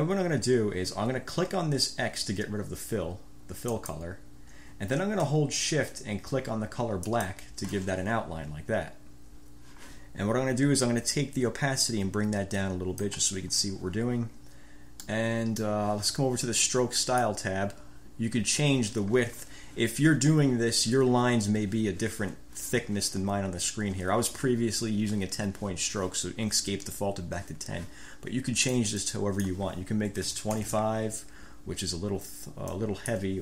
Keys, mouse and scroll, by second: 3.8 click, 15.2 middle click, 17.1 middle click, 28.8 click, 29.2 click, 30.3-31.2 typing, 32.8 click.